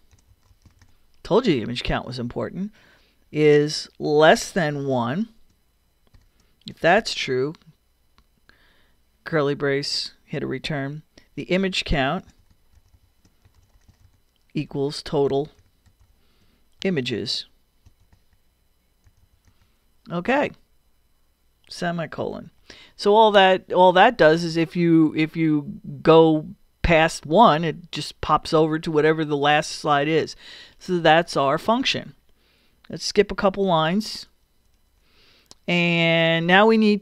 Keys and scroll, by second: 0.0-1.0 typing, 4.3 shift+,, 4.9 shift+i, 6.2 shift+0, 7.0 shift+[, 8.2 shift+Return, 11.8-14.2 typing, 16.4 shift+l, 16.8 shift+i, 17.9 shift+m, 18.1 a, 22.4 ;, 34.3 Return.